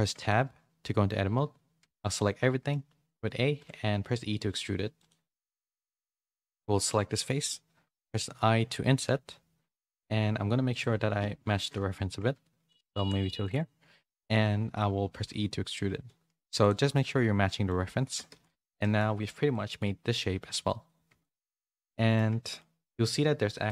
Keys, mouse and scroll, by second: 0.1 Tab, 1.8 a, 2.1 middle click, 3.6 e, 6.7 KP_3, 8.1 middle click, 8.5 i, 11.5 KP_3, 12.8 s, 15.1 e, 17.0 middle click, 18.0 Tab, 18.3 a, 18.5 a, 18.8 middle click, 19.5 middle click, 21.2 middle click, 21.7 middle click, 22.4 shift+middle click, 23.6 middle click.